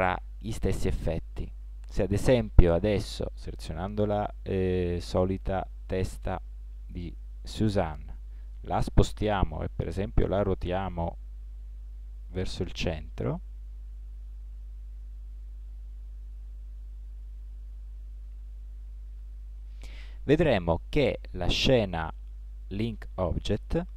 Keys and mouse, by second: 6.4 click, 7.2 click, 9.8 r.